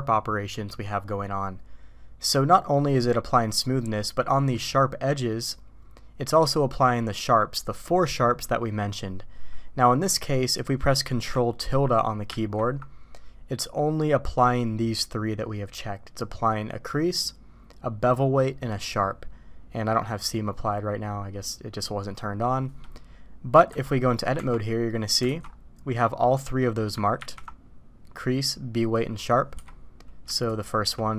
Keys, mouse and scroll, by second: 3.9-4.2 middle drag, 10.1-10.6 middle drag, 12.3 ctrl+`, 24.3 Tab, 24.9 middle click, 25.2 alt+a, 27.2 ctrl+`, 30.5 alt+click.